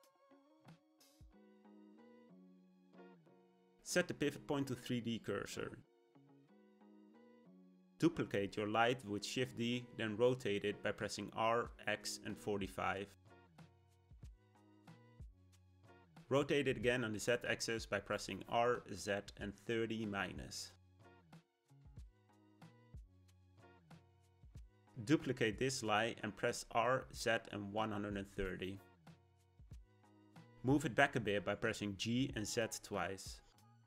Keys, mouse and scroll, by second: 3.8 ., 8.8 shift+d, 15.1 r, 25.2 shift+d, 28.7 g.